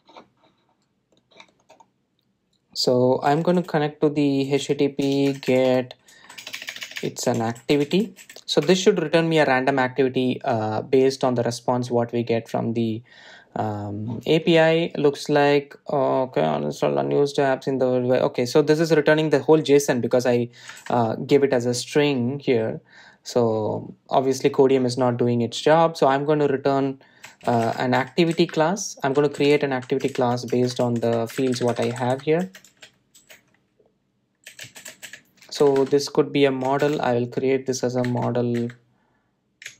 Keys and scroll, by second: 28.6 Delete, 37.8 alt+Return, 39.5 alt+Return.